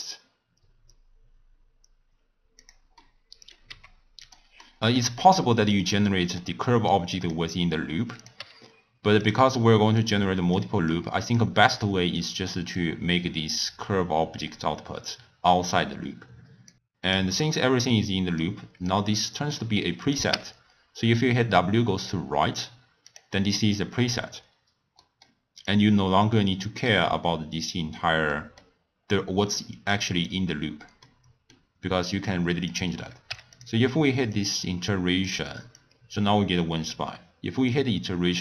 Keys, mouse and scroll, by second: 3.0 middle click, 3.7 g, 4.6 middle click, 5.2 g, 6.1 middle click, 6.9 click, 8.2 click, 8.4 g, 10.0 drag, 10.9 click, 11.9 click, 12.8 click, 16.7 click, 17.6 middle click, 18.4 click, 19.1-20.0 middle drag, 20.0 click, 20.3 w, 23.4 middle click, 23.9-25.0 scroll up 2, 25.0-25.6 middle drag, 25.6 click, 28.4-29.9 middle drag, 29.9 click, 31.0-32.6 middle drag, 32.6 click, 34.3 drag, 35.7-38.1 drag.